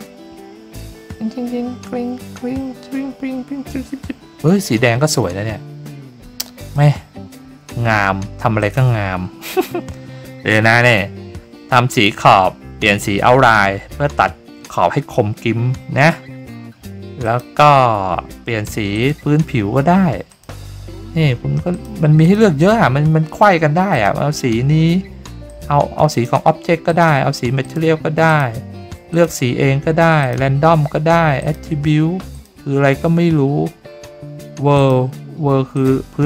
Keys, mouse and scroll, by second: 8.6 click, 17.2 click, 18.9 click, 20.3 click, 21.7 click, 22.2 click, 23.9 click, 25.4 click, 26.1 click, 26.8 click, 27.6 click, 28.2 click, 29.1 click, 30.2 click, 31.4 click, 32.3 click, 34.7 click, 35.7 click.